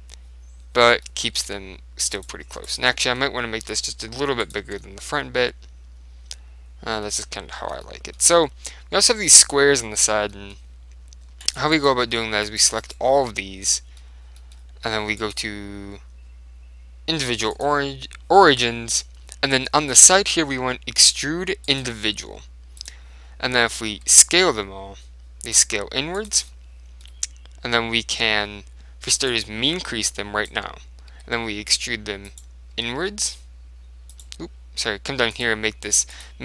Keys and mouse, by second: 1.1-2.6 middle drag, 1.5 Tab, 2.3 click, 3.8 s, 4.6 click, 4.8 Tab, 4.9-6.5 middle drag, 7.3-9.6 middle drag, 7.7 Tab, 10.4 middle click, 11.5 click, 12.6-14.7 right drag, 13.6-14.7 middle drag, 15.3 click, 15.3 middle click, 21.7 click, 24.0 s, 26.3 click, 26.6-28.3 middle drag, 29.4 click, 31.2 e, 32.5-34.2 right drag, 32.9 s, 34.2 right click, 35.4 click.